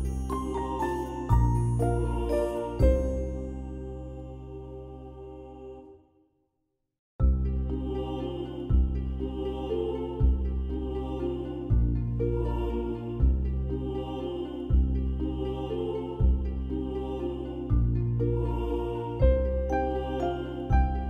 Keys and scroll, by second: 0.0 ctrl+BackSpace, 1.2 ctrl+=, 1.2 ctrl+=, 1.3 ctrl+=, 1.6 space, 7.6 space, 7.9 space, 8.6 ], 8.7 ], 9.9 space, 16.0 ctrl+0.